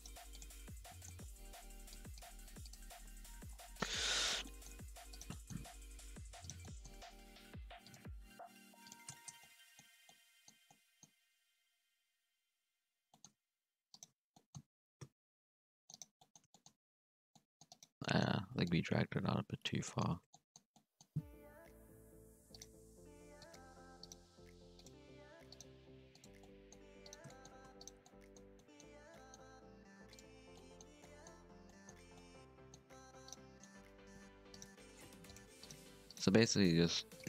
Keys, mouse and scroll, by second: 0.1 g, 0.6-0.9 scroll down 5, 0.9 shift+middle click, 1.1 scroll up 1, 1.3 z, 1.9 click, 2.2 g, 2.9 z, 3.2-3.7 scroll down 2, 3.7 middle click, 4.3 Tab, 4.4 middle click, 4.7-5.1 scroll up 1, 5.1 right click, 5.3 middle click, 5.8 g, 6.6 middle click, 7.0 scroll up 2, 7.2 g, 7.9 g, 9.0 shift+middle click, 9.2 scroll down 1, 9.3 middle click, 9.9 Tab, 10.0 scroll up 1, 10.0-10.4 middle drag, 10.4 scroll down 1, 10.6-11.0 middle drag, 11.0-11.6 scroll up 1, 11.6 KP_1, 11.8 Tab, 12.3 scroll up 1, 13.1 shift+middle drag, 13.3 alt+a, 13.9 alt+shift+right click, 14.2 scroll down 1, 14.3 middle drag, 14.5 z, 15.0 c, 16.1 middle click, 16.9 c, 18.0 middle click, 18.6-19.8 drag, 19.8 middle click, 20.1 alt+a, 20.3-21.5 middle drag, 21.5 KP_3, 22.2 scroll up 1, 22.5 right click, 22.6 g, 24.0 right click, 24.4 g, 25.5 right click, 25.7 g, 26.4 middle click, 26.9 2, 27.0 right click, 27.3 shift+middle click, 27.8 shift+right click, 28.0 middle click, 28.4 scroll down 1, 28.5 middle click, 28.8-29.1 scroll up 2, 29.1 middle click, 29.4 x, 30.5 middle click, 31.5 scroll down 1, 31.6 middle click, 31.9 Tab, 32.1 scroll up 1, 32.1 middle click, 32.8-33.1 scroll up 2, 33.1 1, 33.2 right click, 33.4 middle click, 33.8 g, 34.7 g, 35.6 right click, 35.8 g, 36.3 right click, 36.5 g.